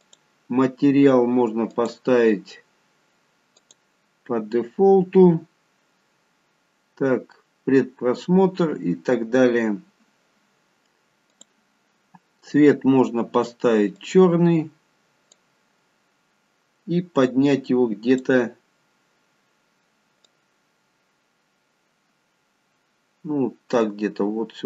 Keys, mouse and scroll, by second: 1.8 click, 11.3 click, 19.0 click, 22.8 click.